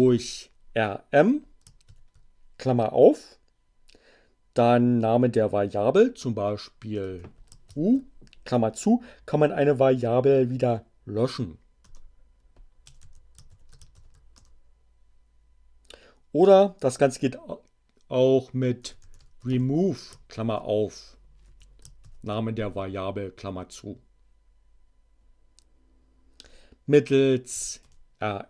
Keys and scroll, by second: 0.1 m, 1.7 shift+8, 6.9 u, 7.7 shift+9, 11.8 Return, 12.5-13.9 typing, 14.2 shift+Return, 18.4-20.3 typing, 21.3 u, 21.9 shift+9, 25.1 BackSpace, 27.4 r, 27.7 m.